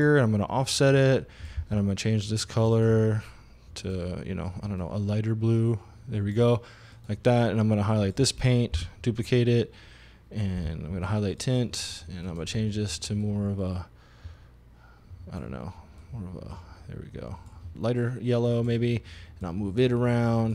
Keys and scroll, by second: 1.7 e, 8.8 super+d, 10.6 e.